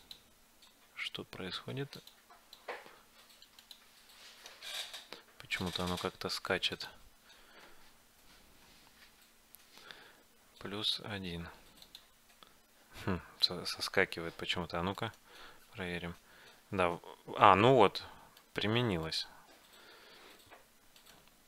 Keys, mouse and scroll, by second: 0.1-2.0 drag, 4.8 ctrl+z, 5.7-8.0 drag, 15.2-16.9 right drag, 16.1 g, 16.9 click, 19.2-21.0 right drag, 21.1-21.4 right drag.